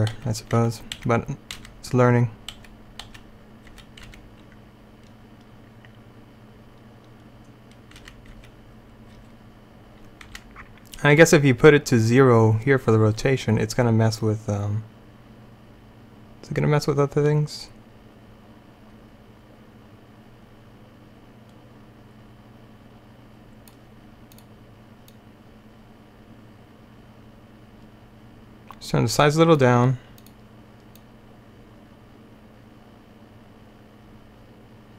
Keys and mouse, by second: 0.2 Left, 0.7 Right, 1.1 Right, 1.6 Right, 2.6 Left, 3.1 Left, 3.8 Left, 4.1 Right, 8.1 Right, 8.4 Left, 9.2 Left, 10.4 Right, 11.3 Left.